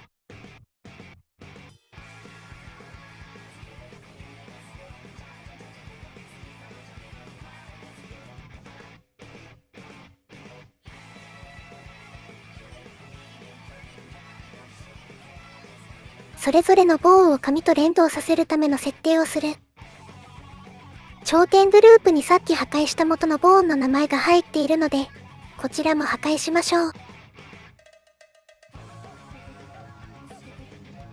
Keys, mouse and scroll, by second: 0.3 click, 0.8 click, 1.1 click, 1.4 click, 1.6 g, 2.1 click, 2.2 click, 2.3 click, 3.1 g, 3.4 click, 3.9 click, 4.1 click, 4.3 g, 4.5 click, 4.7 middle click, 4.8 middle click, 4.9 click, 5.1 middle click, 5.4 right click, 5.5 g, 5.8 middle click, 6.0 shift+middle click, 6.2 click, 6.4 middle click, 6.6 shift+middle click, 7.7 shift+middle click, 7.9 middle click, 8.5 shift+middle click, 8.9 middle click, 9.2 middle click, 9.8 middle click, 10.0 shift+middle click, 10.5 middle click, 11.1 click, 11.6 Delete, 12.2 middle click, 13.0 Delete, 13.3 click, 13.7 click, 14.3 shift+click, 14.5 click, 14.7 click, 14.9 middle click, 15.8 click, 16.5 click, 17.3 shift+click, 17.9 click, 20.7 click, 23.2-24.7 drag, 25.3-26.3 drag, 27.6 click, 28.3 click, 29.3 click, 29.9 shift+click, 30.4 click.